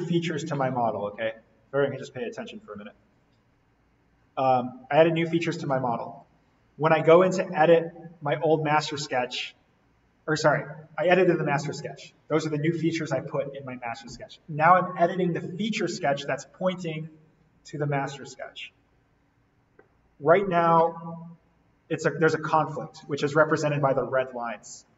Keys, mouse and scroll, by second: 2.2-2.6 scroll down 1, 2.6-3.6 scroll up 1, 3.6-4.0 scroll down 1, 4.4-5.9 scroll down 1, 5.9-8.4 scroll up 1, 18.2 scroll down 1, 20.6-22.5 scroll down 1, 24.6-24.9 scroll up 1.